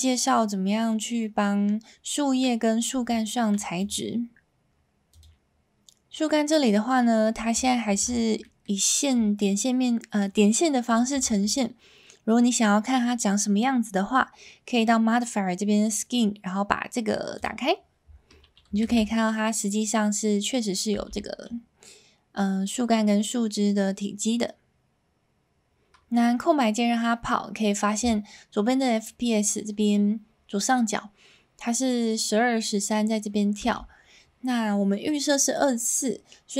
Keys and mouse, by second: 3.8 click, 7.6 shift+middle drag, 8.4 middle click, 11.2 shift+middle drag, 17.4 click, 18.9 alt+a, 19.1-20.5 middle drag, 20.9 space, 33.8 space.